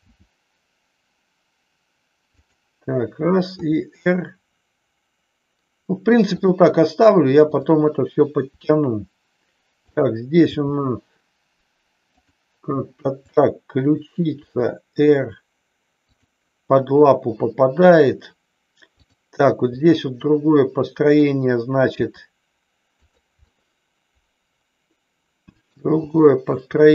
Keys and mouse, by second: 0.0 g, 2.4 click, 3.5 r, 7.5 click, 8.5 r, 9.7 click, 10.5 g, 12.1 click, 13.1 click, 14.4 r, 16.1 click, 19.7-21.1 middle drag, 22.0 r, 23.0 click, 23.4-25.6 middle drag, 26.0-26.5 shift+middle drag.